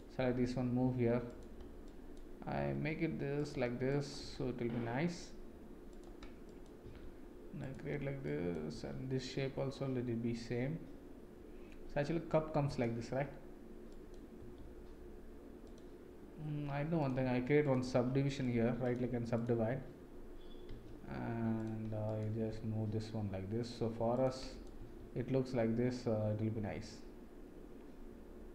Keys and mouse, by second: 0.1 g, 1.9 drag, 2.5 g, 3.9 click, 4.2 g, 6.4 click, 6.8 g, 8.2 click, 8.7 g, 13.9 click, 14.4 g, 17.0 click, 17.6 shift+click, 18.4 right click, 19.3 click, 20.6 g, 22.0 click, 22.3 g, 24.6 click, 24.7 g.